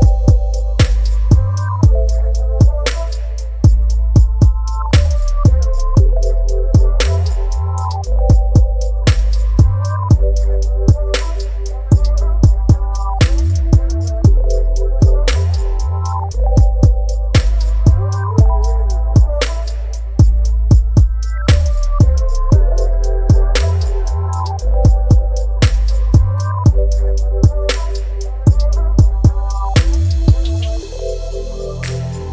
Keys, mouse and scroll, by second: 3.4-5.1 drag, 5.1 typing, 6.0 Return, 8.6 click, 10.9-14.5 alt+drag, 14.5-17.4 alt+drag, 17.4-25.0 alt+drag, 25.0-27.8 alt+drag, 27.8-30.5 alt+drag, 30.5-32.3 alt+drag.